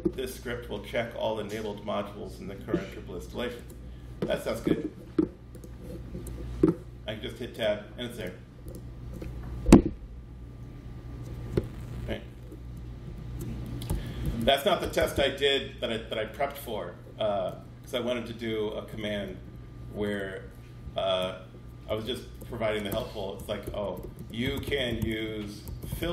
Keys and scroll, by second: 3.4 Tab, 6.0 Tab, 12.9 shift+super+Left, 13.7 super+c, 14.0 Right, 14.6 Return, 17.3 super+v, 18.7 space, 19.1 -, 19.8 BackSpace, 20.0 BackSpace, 20.6 Up, 21.7-24.7 typing.